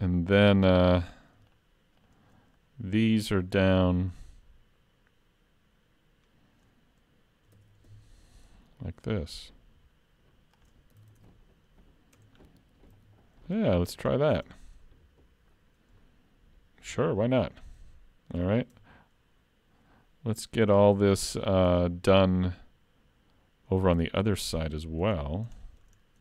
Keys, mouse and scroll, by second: 1.5 shift+click, 2.6-5.1 scroll down 1, 7.6 shift+d, 11.0 alt+a, 11.2 Tab, 12.2 Tab, 12.3-12.9 scroll down 4, 13.0 alt+a, 13.5 middle click, 14.2 shift+middle click, 14.6-15.2 scroll up 1, 15.2 scroll up 1, 17.5 click, 18.8 Tab, 24.6 shift+middle click, 25.2 scroll up 3, 26.0 shift+scroll up 2.